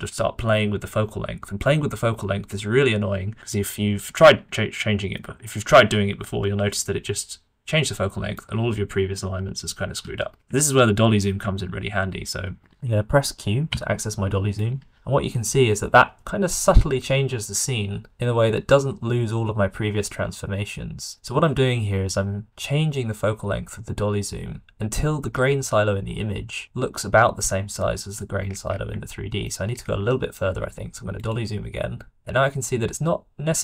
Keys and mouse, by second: 5.1-7.2 middle drag, 7.2 click, 8.4-9.5 middle drag, 10.1 ctrl+z, 10.6 shift+middle click, 11.5 shift+middle click, 13.6 q, 15.3-20.0 middle drag, 28.6 middle click, 29.0 shift+middle click, 30.1 shift+middle click, 30.5 q.